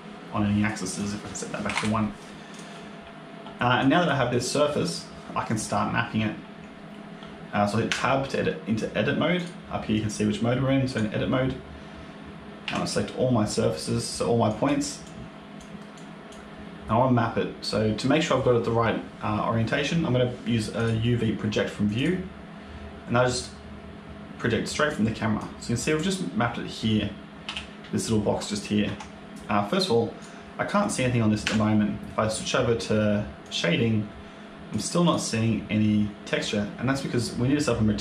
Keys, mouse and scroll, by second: 0.8 click, 2.4 click, 3.7 click, 4.3 click, 7.8 Tab, 9.2 click, 12.5 a, 14.4 click, 14.9 click, 15.8 click, 20.6 click, 25.3 click, 27.3 g, 30.1 click, 31.3 Tab, 33.3 click, 34.6 click, 34.9 click.